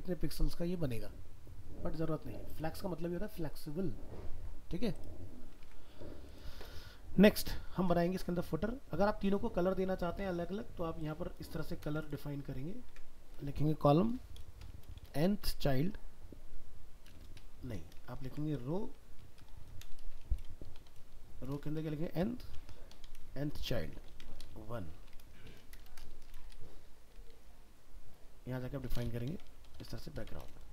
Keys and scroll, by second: 5.6 alt+Tab, 11.8 ctrl+c, 12.9 ctrl+v, 18.2 ctrl+shift+Right.